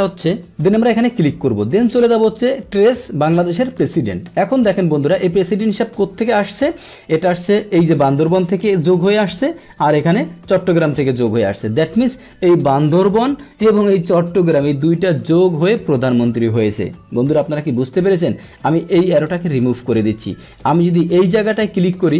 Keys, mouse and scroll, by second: 3.7 click, 19.5 click, 21.0 click.